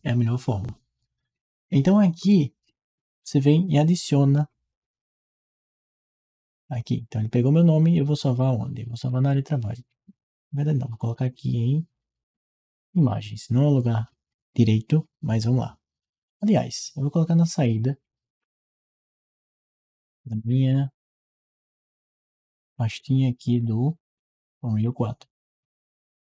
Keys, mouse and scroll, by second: 10.9-12.1 drag, 19.2 middle click, 19.2-19.5 scroll down 2, 19.8-20.4 scroll up 1, 20.6 scroll up 2, 23.8 scroll up 2, 24.0-26.3 scroll down 2.